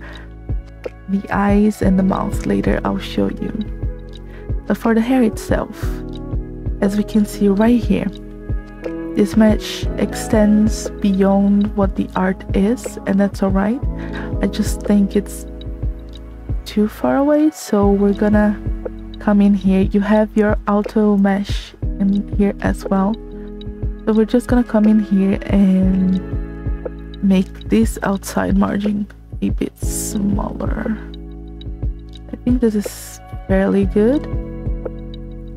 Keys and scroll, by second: 6.7 space.